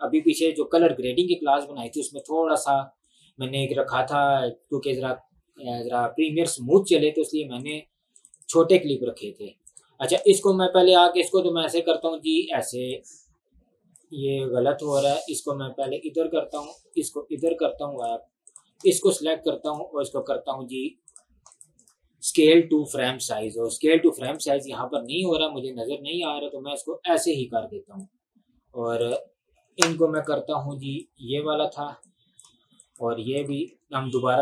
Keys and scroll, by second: 29.7 Delete, 33.7 Delete.